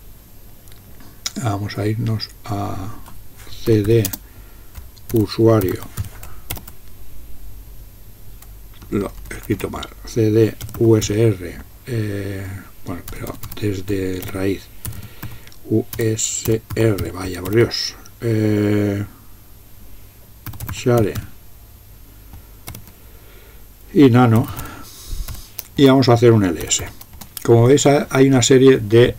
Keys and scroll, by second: 3.5-6.5 typing, 8.9-11.6 typing, 13.2-18.0 typing, 20.3-21.7 typing, 22.7 typing, 24.2-25.3 typing, 25.8 Return, 26.4-27.2 typing, 27.2 Return.